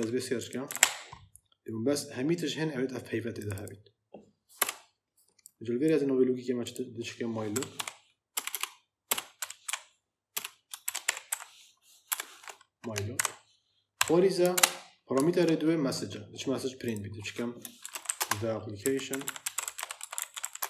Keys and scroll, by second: 4.5 BackSpace, 7.4 m, 7.7 y, 8.2 BackSpace, 9.3-12.0 typing, 12.5 F11, 13.1 Right, 13.9 ,, 14.4 shift+Return, 17.5-20.6 typing.